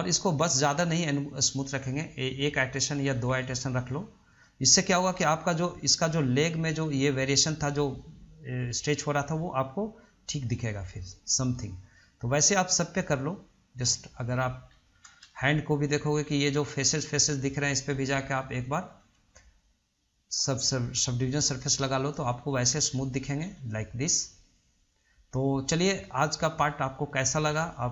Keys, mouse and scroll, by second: 3.5-4.7 drag, 4.7-5.8 middle drag, 5.8-11.8 drag, 15.0 middle click, 15.3 scroll up 1, 15.5-16.2 shift+middle drag, 16.2 click, 16.5-19.1 middle drag, 21.0 click, 21.9-22.6 middle drag, 22.6 click, 22.9 scroll down 1, 23.1-23.6 middle drag, 23.6 scroll up 1, 23.9-25.9 middle drag, 25.9-26.3 scroll down 2, 26.3-27.1 shift+middle drag, 27.1 scroll up 1, 27.3-27.9 shift+middle drag.